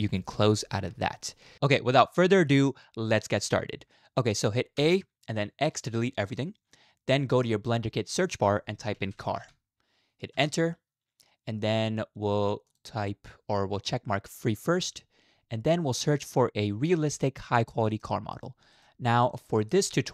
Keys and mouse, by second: 4.8 a, 5.7 x, 8.3 click, 8.8-10.4 right drag, 12.7-14.9 right drag.